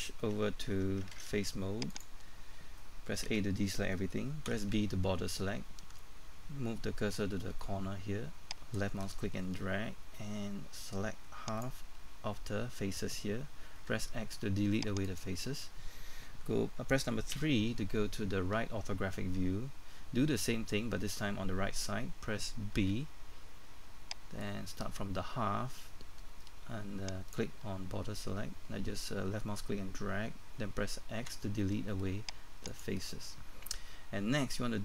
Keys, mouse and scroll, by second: 0.0 Tab, 1.9 ctrl+Tab, 1.9 click, 3.3 a, 8.7-11.9 drag, 13.8 x, 15.0 click, 17.3 KP_3, 22.8 b, 24.4-28.1 drag, 31.2 x, 32.7 click.